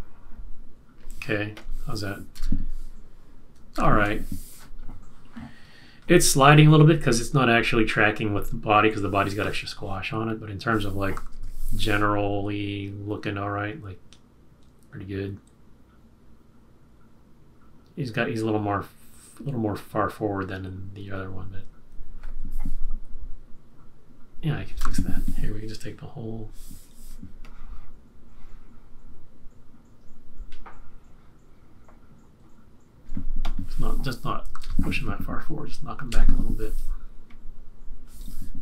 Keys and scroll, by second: 2.3 Return, 3.7 super+-, 11.3 super+-, 24.6 Return, 34.5 super+=, 36.0 super+=, 36.1 shift+Left.